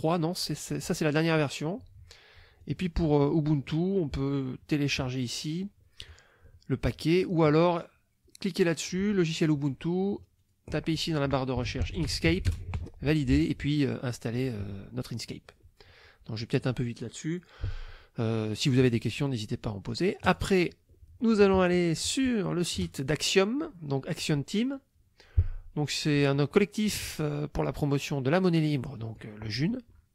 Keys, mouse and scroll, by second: 2.6 click, 4.2 click, 6.1 click, 8.7 click, 10.4 click, 11.4-12.8 typing, 20.3 click, 22.8 click, 29.0 click.